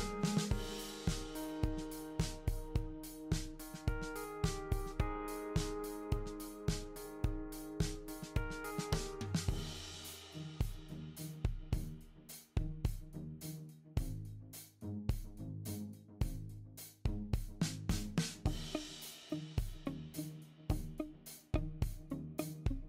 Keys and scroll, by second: 0.9 ctrl+d, 1.7 ctrl+d.